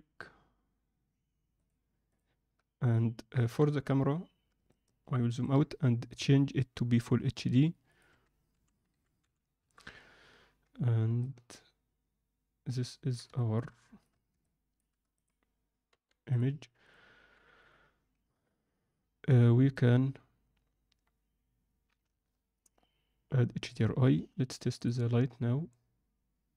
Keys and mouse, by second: 1.6-2.1 drag, 3.4 KP_0, 4.7-5.4 ctrl+middle drag, 6.1 click, 7.9-9.5 drag, 11.2-13.1 ctrl+alt+middle drag, 13.3 alt+shift+middle click, 14.4 alt+shift+middle click, 15.1 click, 15.9 g, 17.1 g, 23.6-25.3 drag.